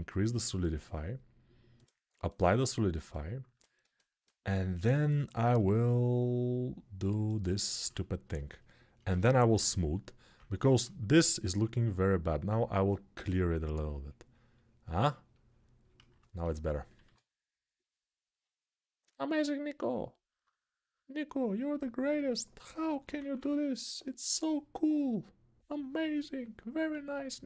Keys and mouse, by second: 5.2 shift+r, 7.9 ctrl+r, 9.3 [, 9.8 [, 10.0 [, 16.8 1, 22.8 [, 23.0 [, 23.3 [, 26.7 ctrl+z.